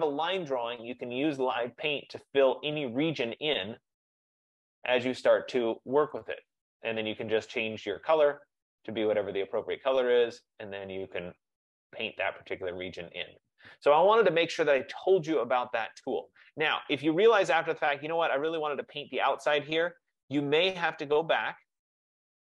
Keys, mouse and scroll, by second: 4.3 click, 6.4 click, 6.6 click, 8.6 click, 9.5 click, 10.4 click, 11.9 click, 12.8 click, 12.8 F15, 16.4 click, 18.6 click, 21.2 click.